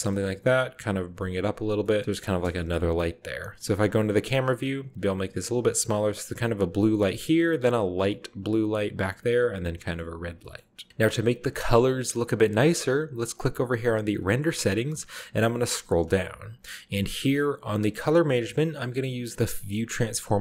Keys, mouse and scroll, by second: 0.0 middle click, 0.2-1.0 scroll up 1, 0.2-2.4 typing, 1.5-2.4 scroll up 1, 1.8 middle click, 3.3-4.3 middle drag, 3.3 scroll up 1, 3.5 scroll down 1, 3.9-5.3 typing, 4.1 shift+scroll down 1, 5.3-5.7 drag, 5.7 middle click, 5.7-6.6 scroll up 1, 7.0 shift+middle click, 9.6-10.2 scroll down 2, 9.9-10.4 shift+middle drag, 10.2-11.4 scroll up 2, 10.6 shift+middle drag, 10.9 ctrl+b, 13.4 click, 15.4-16.8 scroll down 1.